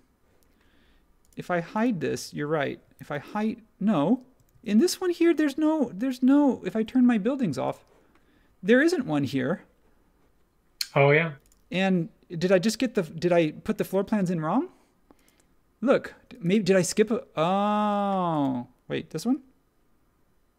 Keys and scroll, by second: 2.9 super+e, 4.5 super+z.